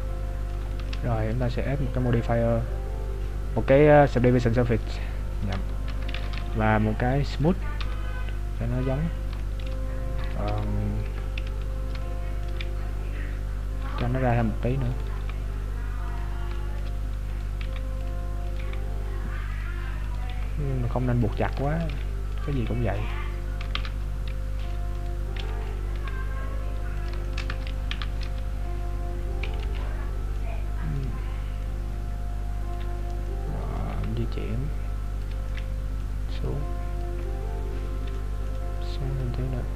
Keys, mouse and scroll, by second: 0.8 shift+middle click, 1.4 click, 6.4 t, 7.5 click, 7.9 t, 8.3 scroll up 2, 8.7-9.2 scroll down 4, 9.5 shift+middle click, 10.5 KP_7, 11.1 Tab, 11.6 z, 12.1 shift+middle click, 12.7-13.0 scroll up 2, 13.9 scroll up 4, 13.9 g, 14.9 right click, 15.3 g, 16.5 shift+middle click, 17.3 right click, 17.7 g, 18.6 g, 20.2 right click, 20.3 g, 21.7 shift+middle click, 22.3 right click, 22.6 g, 23.8 ctrl+Tab, 25.0 right click, 25.5 b, 25.9 g, 27.3 shift+middle click, 27.9 Tab, 28.6-29.1 scroll down 4, 28.6 z, 29.7 KP_Decimal, 30.5 middle click, 31.2 scroll down 2, 31.7 middle click, 33.9 g, 35.5 middle click, 36.5 click, 37.2 middle click, 39.3 click.